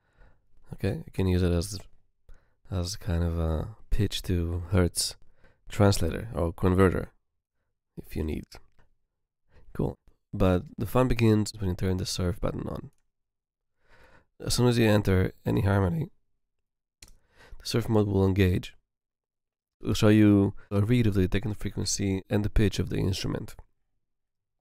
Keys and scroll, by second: 17.0 Home, 17.2 Home.